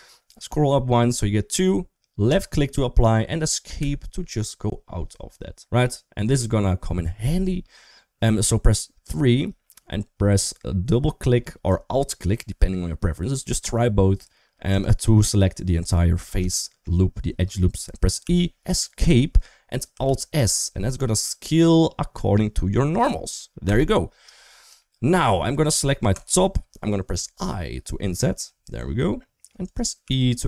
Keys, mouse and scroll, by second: 8.0 3, 14.5 click, 14.7 click, 16.4 shift+middle click, 18.0 e, 19.8 alt+s, 23.5 typing, 24.6 shift+middle click, 28.0 i, 29.8 e.